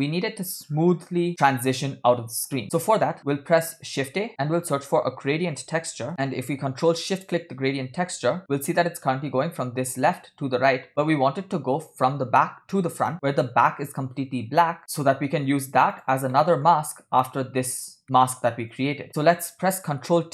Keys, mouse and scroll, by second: 2.6 middle click, 2.6 scroll down 4, 3.4 scroll down 2, 4.4 shift+a, 6.2 click, 7.3 ctrl+shift+click, 8.6-8.9 scroll down 3, 9.1 scroll up 2, 11.1-11.5 middle drag, 15.9 click, 16.4 middle click, 16.9-17.4 scroll up 2, 18.1 middle click, 18.1 scroll up 1, 18.9 click, 19.1 middle drag, 19.5 click.